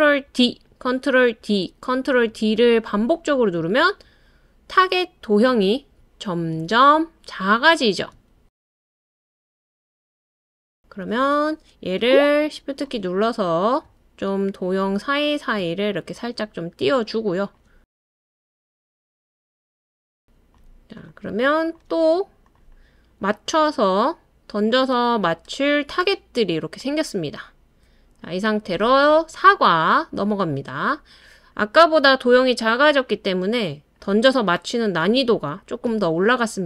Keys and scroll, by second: 0.3 super+d, 1.4 super+d, 2.6 super+d, 3.8 super+d, 5.8 super+d, 6.7 super+d, 8.4 super+d, 8.7 super+d, 9.1 super+d.